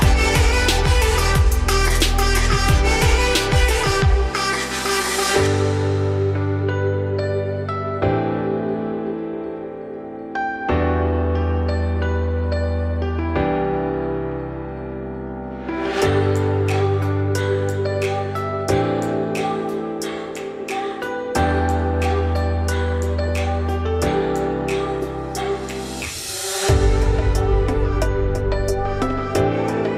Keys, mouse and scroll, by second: 0.1 `, 1.6-2.0 scroll up 5, 2.0 shift+middle click, 2.2-2.7 scroll up 4, 2.7 click, 4.2-6.1 shift+drag, 6.9-8.0 shift+drag, 8.3-9.5 scroll down 9, 9.5-10.1 scroll down 3, 10.1-12.9 shift+middle drag, 12.9-13.8 scroll down 4, 13.8-15.1 scroll up 4, 15.1 click, 15.4-15.9 scroll up 3, 15.9 Tab, 17.1 a, 17.7-19.1 shift+middle drag, 19.1 Tab, 20.0 shift+d, 20.8 r, 24.4-25.2 scroll up 3, 25.2 Tab, 25.5-26.2 scroll down 2, 26.2 Tab, 27.1 g, 29.2 Tab, 29.8 `.